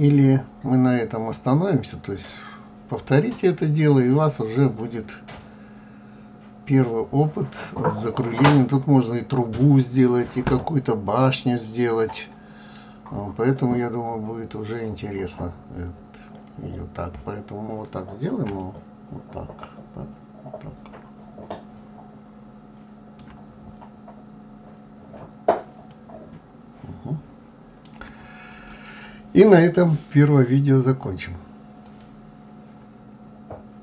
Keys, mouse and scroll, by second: 3.0 scroll up 2, 4.6-5.2 scroll down 1, 5.2-8.3 middle drag, 9.1-10.9 scroll down 2, 12.5 scroll up 2, 13.5 scroll down 2, 14.3-15.9 scroll up 4, 17.1 scroll up 3, 19.1-22.1 shift+middle drag, 23.7-24.2 shift+scroll down 3, 24.6-25.0 scroll up 3, 25.6 scroll down 2, 26.4-28.9 middle drag, 28.9 click.